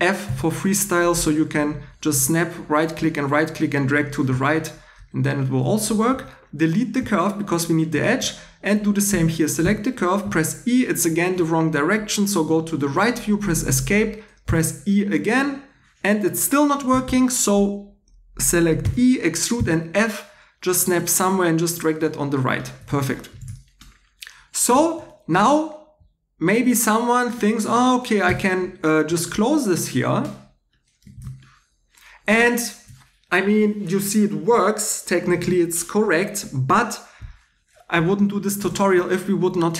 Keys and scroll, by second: 0.2 f, 6.1 2, 7.0 x, 9.6 e, 12.9 Escape, 14.5 e, 16.9 Escape, 18.8 e, 19.6 f, 22.6-23.8 typing, 25.3 2, 28.2 shift+3, 31.1 shift+e.